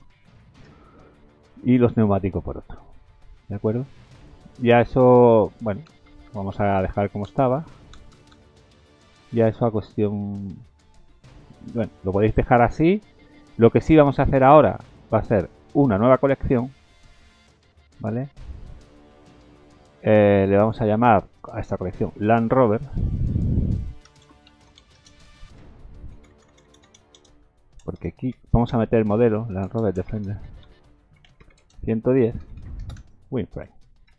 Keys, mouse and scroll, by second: 0.6 g, 4.8 ctrl+z, 5.3-5.8 scroll down 3, 6.1 ctrl+z, 6.3 ctrl+z, 6.5 ctrl+z, 6.7 ctrl+z, 7.4 ctrl+z, 8.1 ctrl+z, 8.3 ctrl+z, 8.5 ctrl+z, 8.9 middle click, 9.7 Tab, 9.8 Tab, 10.3 scroll down 2, 10.7-11.2 scroll up 1, 11.2 middle click, 11.7 click, 12.0 middle click, 13.3 scroll down 2, 14.3 scroll down 2, 14.5-15.9 scroll up 11, 15.9 click, 16.3 right click, 17.6-18.8 scroll down 9, 20.6 click, 20.8 click, 26.3 BackSpace, 26.5 BackSpace, 26.8 BackSpace, 32.6 KP_1.